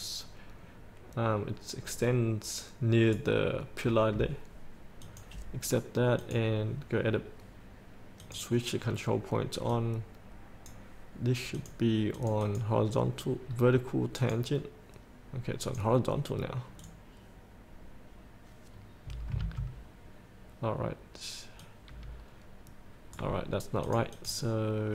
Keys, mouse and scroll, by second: 13.6-14.4 scroll down 1, 14.4 click, 19.6 ctrl+z, 21.8-24.9 drag.